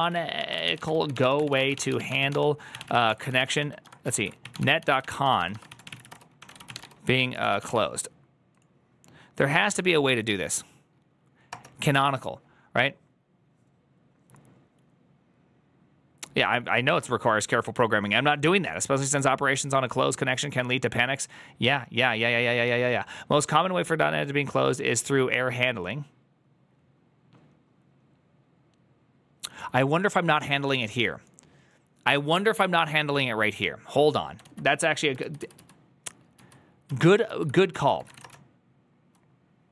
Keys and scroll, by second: 0.0-8.0 typing, 14.0 Return, 35.1 alt+{, 35.1 ctrl+u, 35.3 ctrl+u, 35.4 ctrl+u, 36.2 ctrl+u, 37.6 ctrl+u, 37.6 ctrl+c, 37.7-39.7 typing.